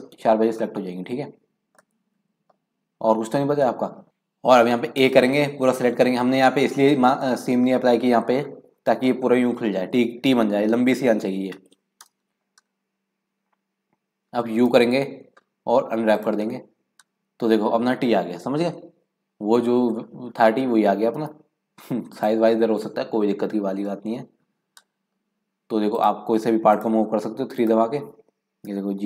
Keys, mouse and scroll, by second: 0.3 scroll up 1, 0.6 middle click, 1.5-1.9 scroll down 2, 1.9 middle click, 2.4-3.4 scroll up 2, 3.4-3.7 scroll down 5, 4.0 middle click, 4.9 a, 6.2 scroll up 2, 6.4 middle click, 7.0 scroll down 2, 7.2 scroll up 1, 7.2-10.3 middle drag, 14.7 u, 21.1 g, 23.9 scroll up 1, 24.0-25.3 middle drag, 25.3 scroll up 2, 25.9 click, 26.8 click, 27.5 3, 27.6-28.7 drag, 28.7 g.